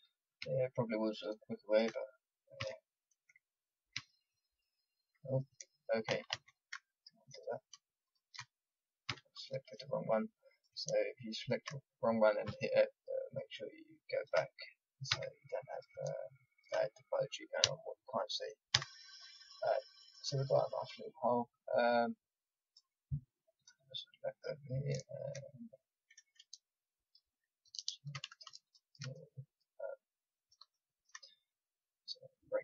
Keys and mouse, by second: 0.4 f, 2.6 f, 3.9 f, 4.6 click, 6.0 ctrl+z, 6.3 ctrl+z, 9.0 f, 12.4 f, 15.1 f, 17.6 f, 18.7 middle click, 18.7 a, 21.9 middle click, 22.6-24.3 drag, 28.6 right click, 29.1 middle click, 29.7-31.0 drag, 31.9-32.6 drag.